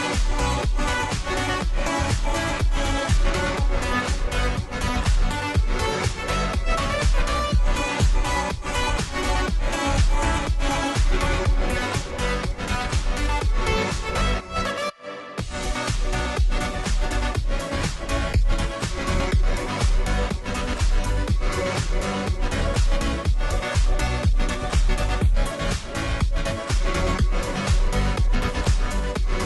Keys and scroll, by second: 4.6 ], 5.9 [, 7.1 ], 7.2 ], 8.2 [, 8.5 [, 9.7 ], 13.9 ], 18.6 [, 18.8 [, 19.2 [.